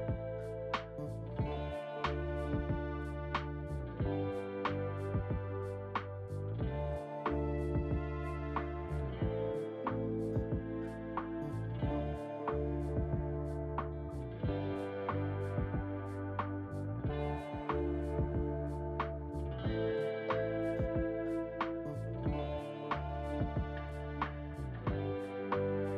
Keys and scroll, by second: 2.7 f, 3.1 Return, 23.0 f, 23.5 Return.